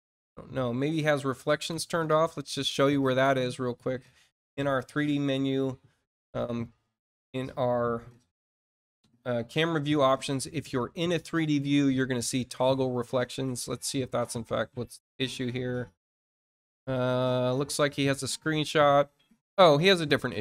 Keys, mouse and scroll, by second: 4.5 click, 14.6-15.1 scroll down 4, 15.5 scroll down 2, 16.2 scroll down 2, 16.8 alt+click.